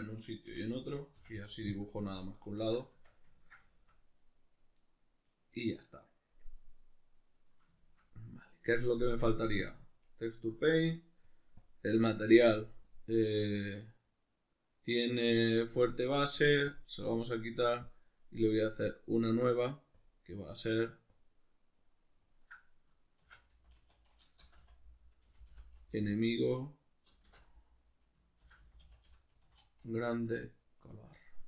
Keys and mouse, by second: 0.5 l, 2.2-11.6 ctrl+middle drag, 2.9 Tab, 9.1 Tab, 11.6-15.7 drag, 16.7-31.4 drag.